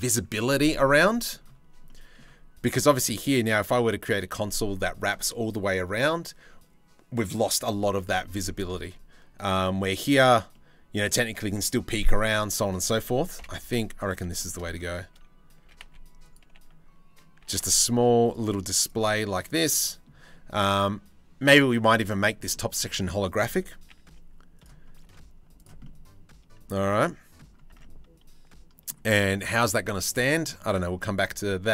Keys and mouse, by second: 0.6 middle click, 1.5 middle click, 2.3 middle click, 8.4 middle click, 10.1 middle click, 10.2 click, 11.7 click, 13.0 KP_7, 13.2 z, 14.0 shift+middle click, 15.2 s, 17.0 g, 18.2 z, 21.9 middle click, 22.4 2, 23.5 g, 24.7 z, 25.5 middle click, 26.7 middle click, 27.4 Tab, 30.2-31.3 middle drag, 31.6 middle click.